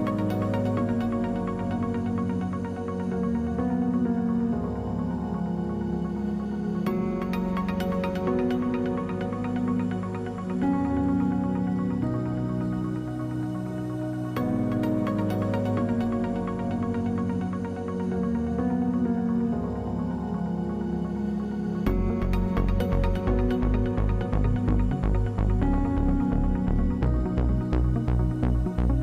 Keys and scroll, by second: 17.5 w.